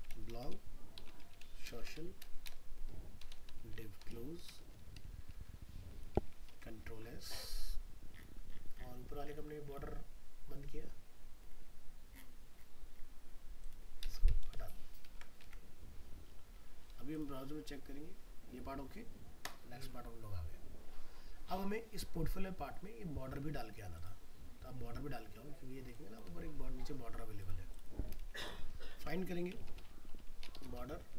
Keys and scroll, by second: 6.5 ctrl+s, 15.1 ctrl+s, 15.4 alt+Tab, 28.4 ctrl+Home, 28.8 ctrl+f.